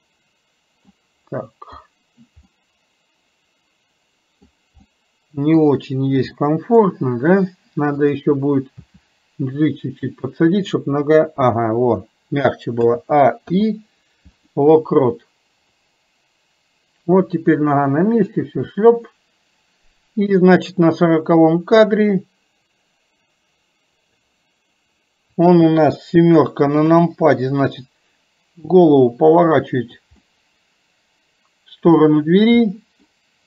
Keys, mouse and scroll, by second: 2.6-4.7 middle drag, 4.9 middle click, 6.5 middle click, 8.1 click, 15.9-24.4 drag, 30.3-32.0 middle drag, 32.8-33.4 middle drag.